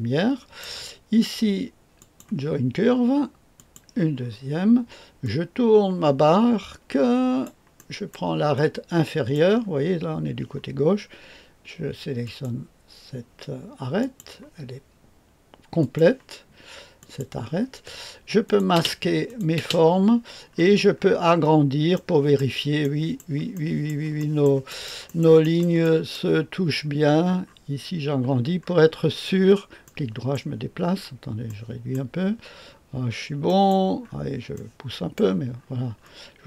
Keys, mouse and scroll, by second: 0.6 right click, 1.9 click, 2.7 click, 3.5 click, 4.1-5.2 scroll down 1, 5.2-7.4 drag, 7.7 right click, 12.2 click, 13.9 click, 15.7 click, 16.9 click, 18.4 click, 18.7 space, 19.2 click, 19.5 space, 20.4-21.9 scroll up 1, 21.9 middle click, 22.3 right click, 22.8 middle click, 23.1 right click, 23.5 middle click, 23.8 right click, 24.1 middle click, 24.4 right click, 24.6 middle click, 24.8 right click, 25.0 middle click, 25.2 right click, 25.6 right click, 26.4 right click, 27.4-28.2 scroll up 1, 28.2-29.8 scroll down 1, 29.8 click, 30.3 right click, 30.8-31.4 scroll down 1, 31.4 click, 31.9 right click, 32.6-33.4 scroll up 1, 34.0-35.1 scroll down 1, 35.5-36.4 scroll up 2.